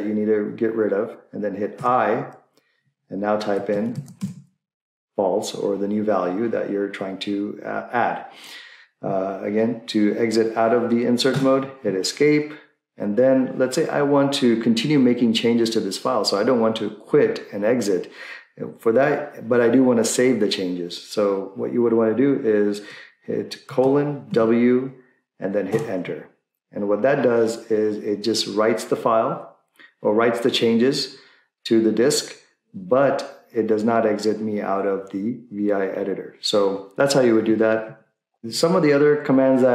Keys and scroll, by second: 1.9 i, 3.2-4.7 typing, 11.4 Escape, 23.7-24.3 typing, 25.7 Return, 38.5 Left, 38.7 Left.